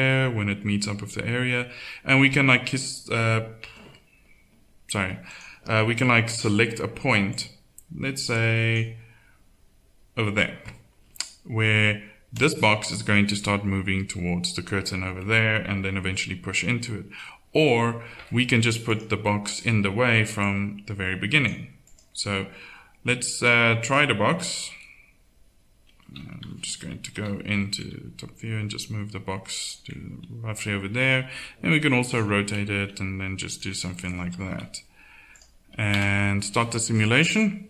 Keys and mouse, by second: 6.8-9.3 drag, 12.4-17.0 drag, 18.9 click, 20.4 middle click, 26.4 z, 26.9 z, 27.1 KP_7, 27.8 g, 31.0 r, 32.7 g, 34.4 KP_1, 36.1 alt+a.